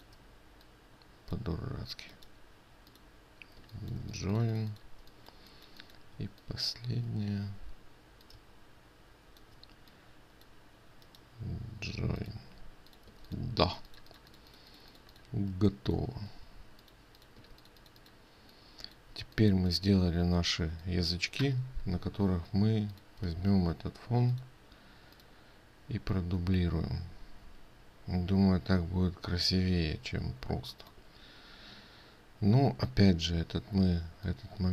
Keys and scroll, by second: 13.7 ctrl+space, 18.0 ctrl+space, 24.0 ctrl+alt+2.